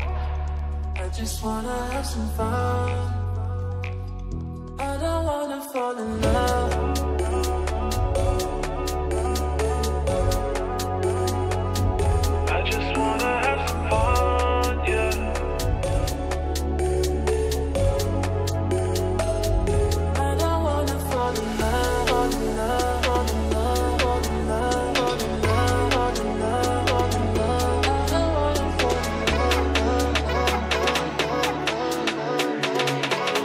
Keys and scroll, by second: 13.4 F4, 18.7 3, 20.4 Return, 22.3 space, 30.6 F4, 30.9 Escape.